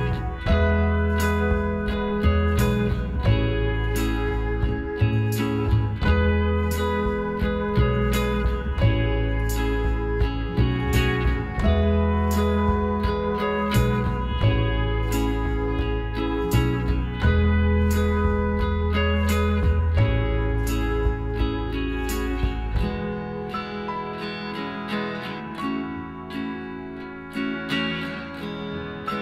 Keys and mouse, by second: 1.1 a, 2.3 Tab, 3.9 Tab, 6.0 KP_Divide, 6.0 middle click, 6.7 a, 7.2-8.7 middle drag, 9.8-12.6 middle drag, 12.1-15.6 right drag, 14.6-16.5 middle drag, 16.8 s, 20.2 z, 21.2-23.2 drag, 22.6 z, 23.2-24.8 middle drag, 24.9-26.8 drag, 26.7-29.2 middle drag.